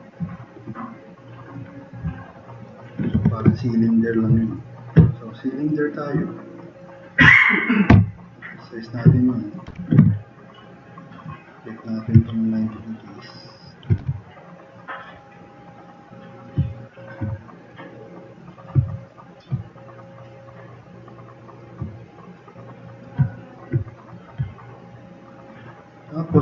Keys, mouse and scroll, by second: 2.6 drag, 3.2 4, 8.0 t, 8.1 drag, 8.4-9.5 drag, 9.7 e, 10.0 r, 11.2-13.6 drag, 14.0 e, 15.0 click, 18.8-19.3 drag.